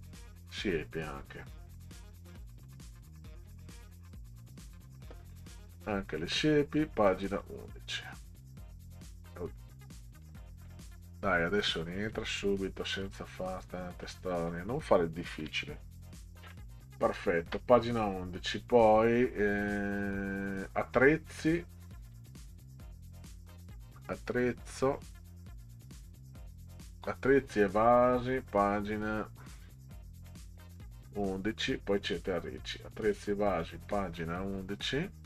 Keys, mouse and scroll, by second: 1.5 scroll up 2, 2.2 scroll up 2, 2.9 scroll up 2, 3.5 click, 4.3 click, 4.5 click, 7.1 click, 7.3 click, 8.4 click, 8.6 click, 10.2 click, 11.6 click, 12.1 click, 12.8 click, 13.1 click, 13.9 click, 15.4 1, 16.4 Delete, 17.6 Down, 22.1 click, 23.8 scroll down 2, 24.5 scroll down 6, 25.7 scroll down 2, 29.6 scroll down 2, 30.3 middle click, 32.2 scroll up 2, 33.1 click, 33.6 click.